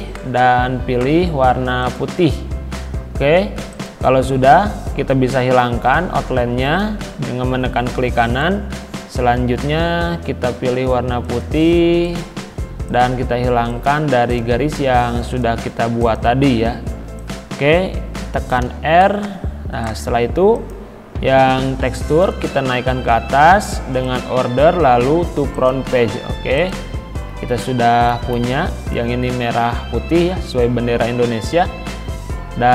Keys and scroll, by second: 18.7 r.